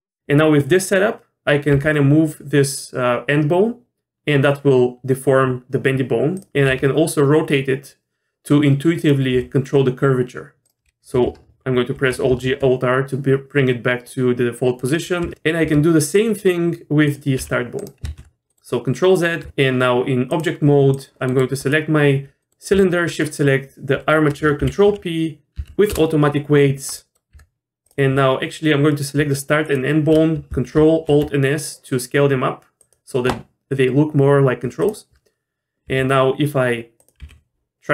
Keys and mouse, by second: 1.7 g, 6.6 r, 9.3 r, 12.0 alt+g, 12.3 alt+r, 15.2 r, 15.6 r, 17.4 g, 18.1 ctrl+z, 18.5 middle click, 19.8 Tab, 20.3 click, 21.3 middle click, 21.6 click, 22.4 middle click, 23.2 shift+click, 24.6 ctrl+p, 26.9 middle click, 27.3 Tab, 27.8 click, 29.6 shift+click, 30.7 ctrl+alt+s, 34.8 click, 35.9 r, 37.2 g.